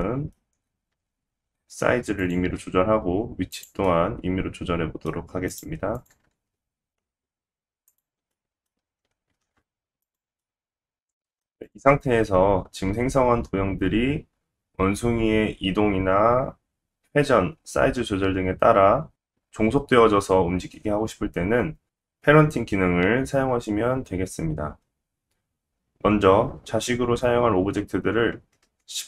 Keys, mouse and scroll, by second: 0.0 middle click, 0.4-0.9 scroll down 2, 0.9 s, 2.5 g, 3.5 click, 3.8 middle click, 5.5 click, 5.9 click, 6.3 shift+a, 8.3 middle click, 8.8 g, 10.4 middle click, 25.7 click.